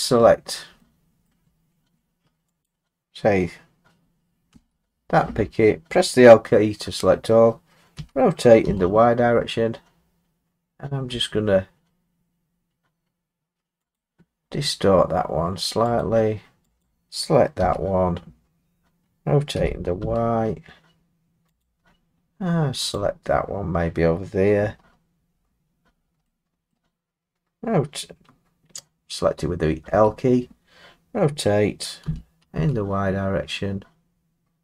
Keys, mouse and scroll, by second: 1.2 middle click, 1.3 middle click, 2.6 click, 7.9 r, 8.6 y, 14.0 click, 14.5 middle click, 14.6 middle click, 16.0 click, 16.8 click, 17.6 l, 19.5 r, 20.0 y, 21.6 click, 22.9 click, 24.8 middle click, 24.8-26.2 scroll, 26.7 scroll, 32.0 r.